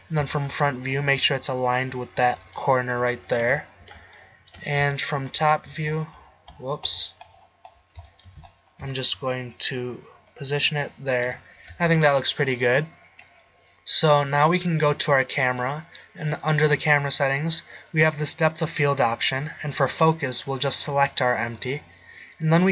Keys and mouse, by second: 0.2 z, 1.2 g, 3.4 KP_7, 11.3 KP_0, 11.9 shift+z.